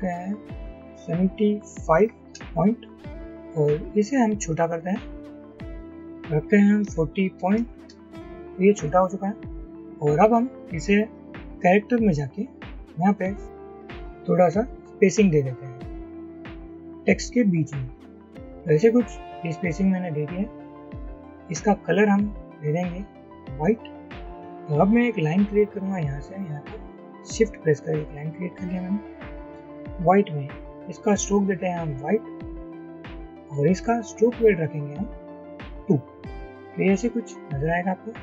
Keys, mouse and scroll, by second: 1.9 typing, 2.4 Return, 6.2-7.4 typing, 7.9 Return, 14.1 shift+Up, 15.4 shift+Up, 15.6 shift+Up, 16.1 shift+Up, 16.5 shift+Up, 16.7 shift+Up, 17.6 shift+Down, 18.1 shift+Down, 36.5 double click.